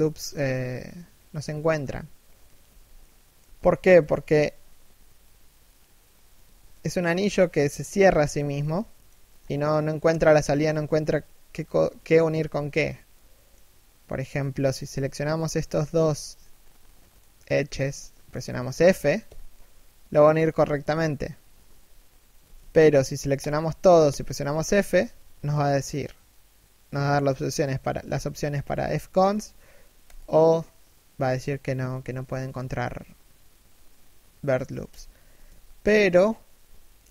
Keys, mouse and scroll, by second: 2.6 middle click, 6.7 shift+middle click, 8.4 middle click, 9.0-9.5 scroll down 1, 10.0 middle click, 11.6 middle click, 14.9 right click, 15.3 z, 15.8 shift+right click, 16.3 middle click, 18.9 f, 23.0 alt+right click, 23.7 f, 35.1 a.